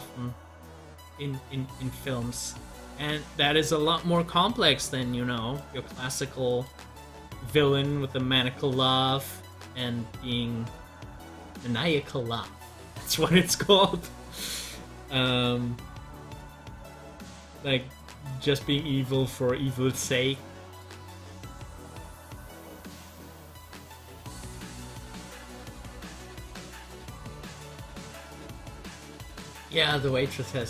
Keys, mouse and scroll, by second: 0.7 scroll down 1, 11.4-13.2 scroll up 1, 15.2 scroll down 1, 21.1 click.